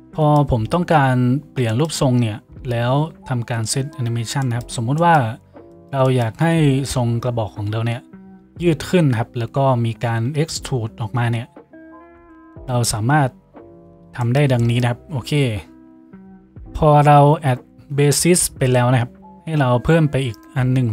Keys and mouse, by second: 20.5-20.9 drag.